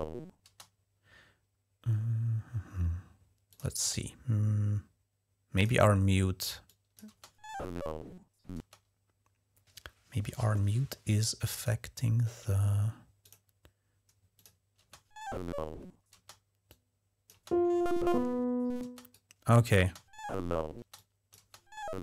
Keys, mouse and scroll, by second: 0.3 space, 3.3 click, 5.3 click, 6.4 click, 6.9 space, 8.4 space, 11.3 click, 13.0 click, 14.1 click, 14.6 space, 15.9 typing, 16.5-17.1 drag, 17.1 typing, 18.6 space, 18.9-19.5 drag, 19.6 space, 20.7 click.